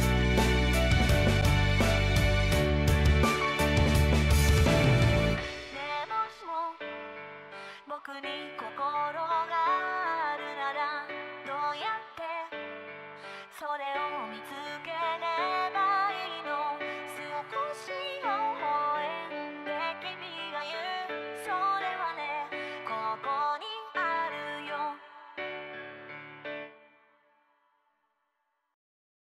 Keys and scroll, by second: 17.1 ctrl+z, 17.2 ctrl+z, 17.4 ctrl+z, 17.5 ctrl+z.